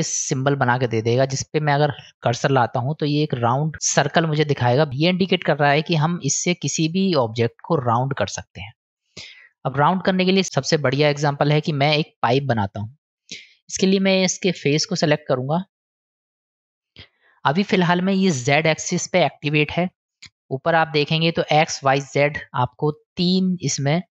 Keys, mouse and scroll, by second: 14.5 click, 15.4 click, 16.3 middle drag, 22.6 click, 23.1 click, 23.6 click.